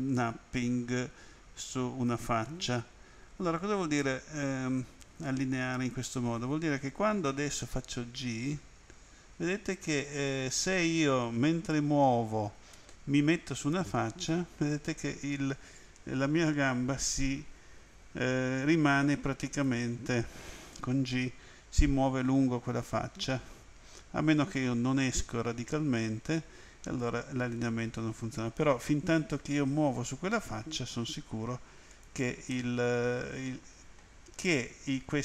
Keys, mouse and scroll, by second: 2.2 click, 4.0 middle click, 7.6 g, 19.1 click, 20.8 g, 31.9 click, 32.5 middle click.